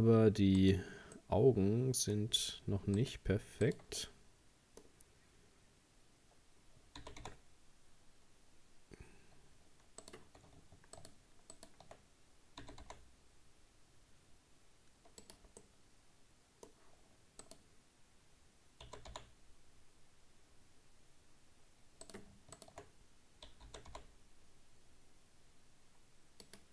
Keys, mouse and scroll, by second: 0.6 right click, 1.2-3.0 middle drag, 3.0 shift+right click, 3.6 shift+right click, 4.0-7.0 middle drag, 7.0 g, 11.0 shift+right click, 11.6 shift+right click, 12.6 g, 15.6-17.4 middle drag, 17.4 right click, 18.8 g, 22.6 shift+right click, 23.7 g.